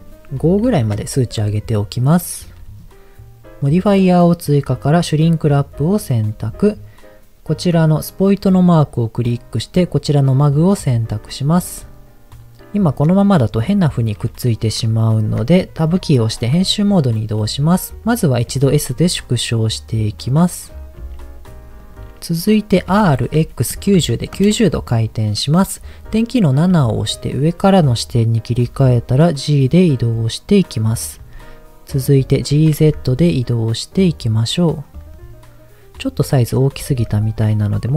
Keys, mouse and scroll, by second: 5.4 click, 8.1 click, 11.2-12.4 scroll up 4, 12.4-14.7 middle drag, 14.8-15.7 scroll down 1, 15.9 Tab, 16.6 scroll down 2, 17.9 right click, 18.4 s, 20.0 click, 20.4-21.0 scroll up 4, 21.0 s, 21.8 click, 22.8 r, 23.4 x, 23.7 KP_9, 24.0 KP_0, 24.4 KP_Enter, 26.8 KP_7, 28.6 g, 31.0 click, 31.4 middle click, 32.5 g, 32.7 z, 34.8 click, 35.1-36.6 middle drag, 36.8 g, 37.0 z, 37.3 click, 37.8 s.